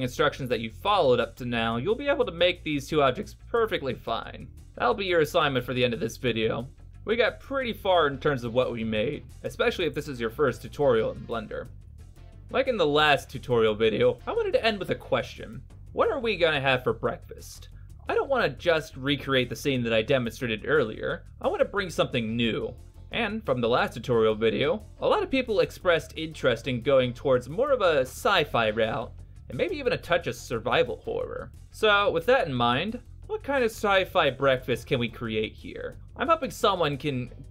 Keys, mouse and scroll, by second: 0.1 scroll down 3, 0.2 middle click, 0.4 scroll up 4, 0.4 middle click, 0.5 Tab, 0.6 middle click, 1.2 alt+shift+right click, 1.5 middle click, 1.6 alt+right click, 1.8 alt+right click, 1.9 alt+middle click, 2.0 alt+right click, 2.1 middle click, 2.3 middle click, 2.6 shift+right click, 2.7 shift+right click, 2.8 x, 3.6 middle click, 3.8 middle click, 4.0 right click, 4.1 middle click, 4.2 e, 4.6 Tab, 4.7 middle click, 4.7 scroll down 4, 4.8 middle click, 5.0 alt+h, 5.1 Tab, 5.2 middle click, 5.5 click, 5.6 click, 5.8 click, 6.0 Tab, 6.0 middle click, 6.2-6.7 scroll down 8, 6.2 middle click, 6.4 middle click, 6.4 scroll up 1, 6.7 click, 7.2 middle click.